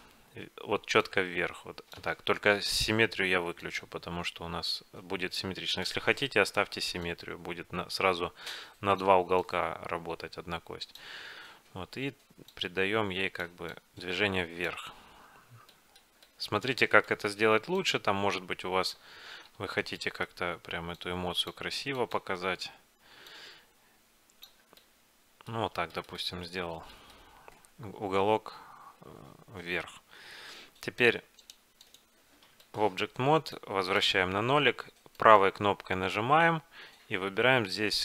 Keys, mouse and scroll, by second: 1.1-2.8 drag, 2.2 ctrl+z, 3.7-5.6 drag, 5.8-9.1 drag, 9.5-11.7 drag, 11.7 middle click, 12.6-15.6 drag, 14.9-19.0 middle drag, 17.9-19.7 drag, 19.7 ctrl+z, 20.0 middle click, 21.1-25.2 drag, 24.9-28.7 middle drag, 31.5-33.2 drag, 32.7-34.5 middle drag, 33.6-36.9 drag, 35.2-38.0 right drag.